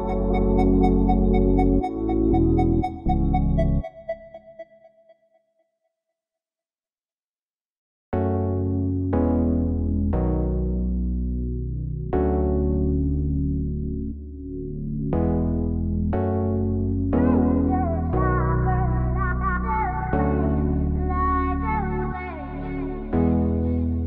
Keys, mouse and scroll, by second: 7.3 middle click, 9.5-11.1 middle drag, 11.7 middle click, 12.5 middle click, 12.8 middle click, 13.1 middle click, 13.2 middle click, 15.1 middle click, 16.6 middle click, 16.9 middle click, 18.6-20.7 middle drag, 22.0 middle click.